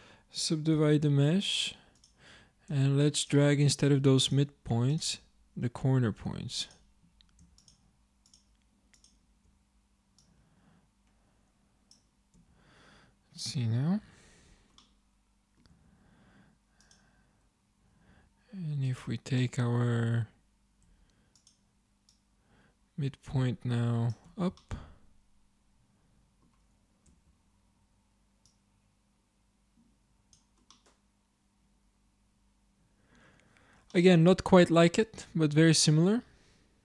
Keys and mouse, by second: 0.8 w, 6.2 a, 9.4 shift+click, 12.4 Tab, 14.2 ctrl+alt+3, 15.0 middle click, 15.7 Tab, 18.1 a, 18.9-20.6 drag, 20.9 z, 24.3 z, 27.1 Tab, 29.0-30.3 drag, 30.8 click, 31.3 middle click.